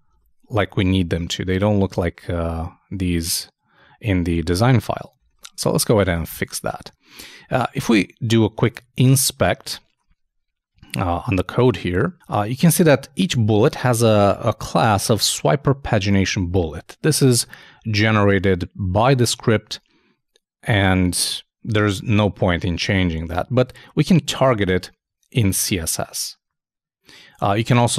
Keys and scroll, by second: 0.1 super+2, 5.2 super+i.